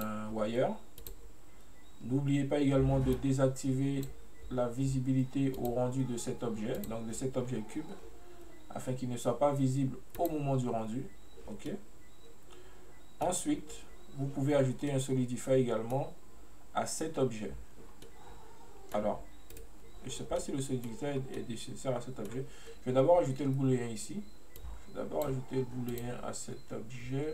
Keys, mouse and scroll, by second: 7.6-10.3 scroll up 1, 10.3 click, 11.8-14.9 middle drag, 15.1-18.0 middle drag, 18.0 scroll down 2, 18.1-19.6 middle drag, 19.6 right click, 20.2-20.6 scroll up 1, 20.6-21.3 middle drag, 21.3 scroll down 1, 21.5-24.5 middle drag, 24.7-26.1 drag.